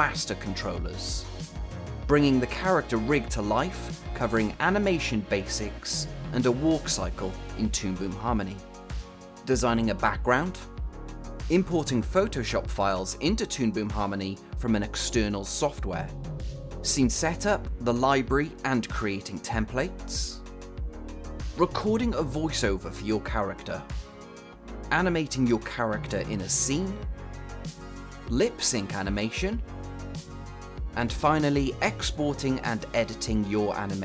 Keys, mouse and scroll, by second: 4.5 click, 11.4 scroll up 1, 11.7 click, 13.3 scroll down 1, 13.9 click, 14.8-15.4 scroll up 1, 15.4 click, 16.2 ctrl+p, 16.8 s, 18.2 scroll up 1, 24.9 click, 25.9 c, 26.3 click, 28.3 click, 32.7 click.